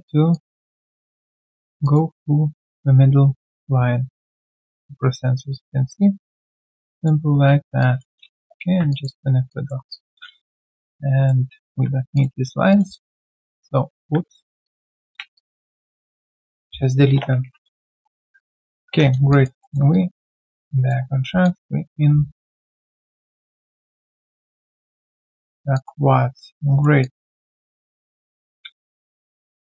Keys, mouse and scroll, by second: 6.5 alt+right click, 6.7 alt+click, 8.3 Return, 9.7 Return, 10.6 right click, 12.1 shift+click, 15.3 shift+click, 17.4 ctrl+Delete, 18.3 right click, 18.7 scroll down 1, 19.2 3, 19.3 alt+click, 19.6 alt+middle click, 19.9 alt+click, 21.0 1, 21.4 alt+click, 21.8 alt+middle click, 22.1 q, 23.9 alt+click, 25.3 right click, 26.0 alt+scroll down 1, 26.4 alt+middle click, 26.7 alt+right click, 27.0 alt+click.